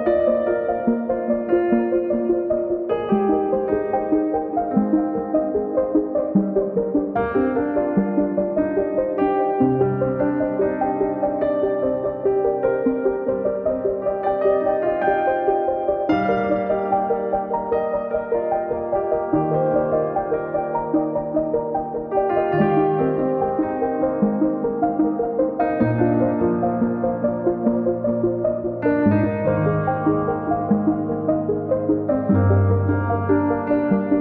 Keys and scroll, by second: 1.5 p, 2.6 space, 6.9 m, 9.0 Return, 11.8 space, 14.3 Return, 16.7 Right, 17.8 space, 20.6 space, 24.5 m, 27.4 space, 29.2 Delete, 30.1 Escape.